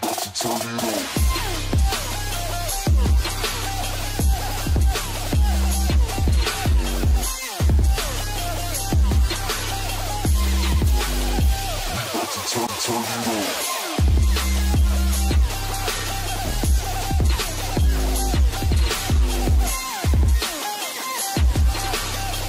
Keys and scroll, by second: 0.2 ctrl+space, 11.1 ctrl+space.